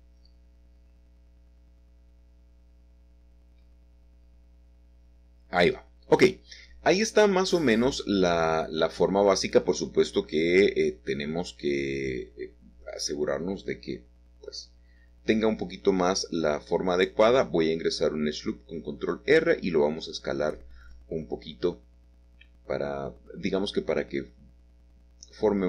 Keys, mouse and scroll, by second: 0.1-1.8 middle drag, 1.4 shift+g, 1.8-2.2 scroll up 1, 2.2 middle click, 2.2-3.3 scroll down 2, 2.8-4.5 shift+middle drag, 5.4-6.4 scroll up 1, 6.9 Tab, 8.2-9.1 shift+scroll down 1, 9.1 Tab, 12.1-13.1 drag, 15.6-16.7 drag, 17.5 click, 19.4 click, 21.4 click, 22.4 click, 22.8 s, 24.2-25.4 drag, 25.4-25.6 middle drag.